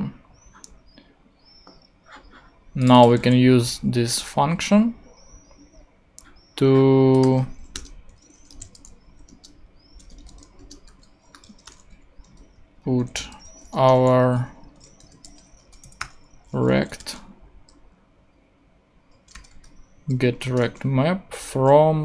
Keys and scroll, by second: 3.9 super+c, 7.7 Return, 8.3-9.1 typing, 9.3 Return, 10.1 shift+Return, 10.2-13.2 typing, 10.6 shift+Return, 13.7 shift+Return, 14.3 Return, 14.6-17.0 typing, 19.1-20.0 typing, 20.4 Return.